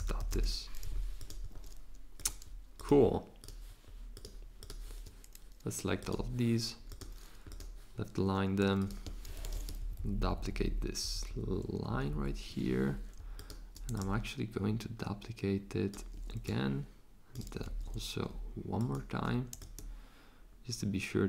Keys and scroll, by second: 0.0-0.8 typing, 9.3 super+c, 9.5 super+v, 9.8 shift+Down, 10.0 shift+Down, 10.1 shift+Down, 10.2 shift+Down, 10.4 shift+Down, 10.5 shift+Down, 10.6 shift+Down, 11.0 shift+Down, 11.3 shift+Down, 11.9 shift+Down, 12.1 shift+Down, 17.6 super+z.